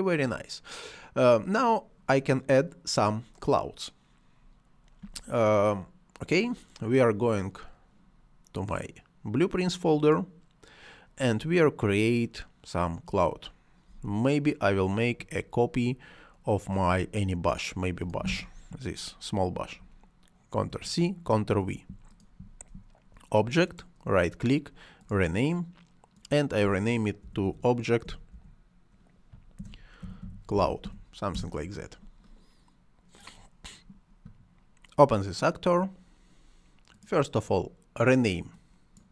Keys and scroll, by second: 20.7 ctrl+c, 21.3 ctrl+v, 27.2 BackSpace, 29.3-31.3 typing, 31.3 Return.